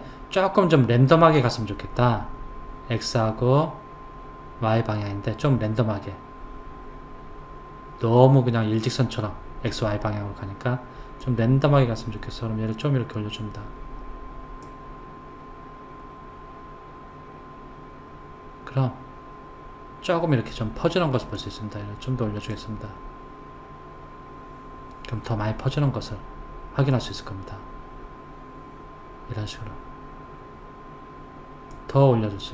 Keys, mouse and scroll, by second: 11.2 click, 21.3 click, 31.7 click.